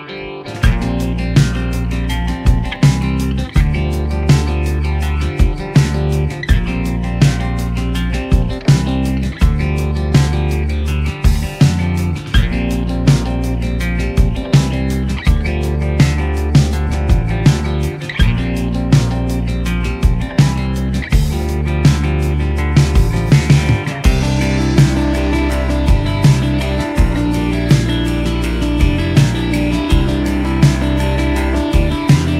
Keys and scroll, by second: 11.0 r, 11.9 r, 13.4 r, 14.2 r, 14.4 z, 15.9 r.